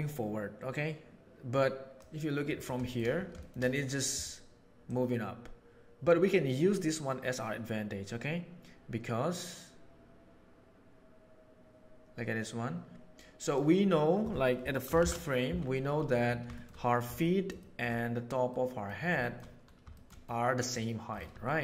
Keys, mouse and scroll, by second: 1.4 right click, 4.8-7.7 right drag, 11.2-13.5 middle drag, 14.9 shift+Left, 15.8-16.4 middle drag, 16.5 shift+middle drag, 17.1-17.7 shift+middle drag, 18.4-18.7 middle drag, 19.1 shift+middle drag, 19.9-20.7 shift+middle drag, 21.3 shift+middle drag.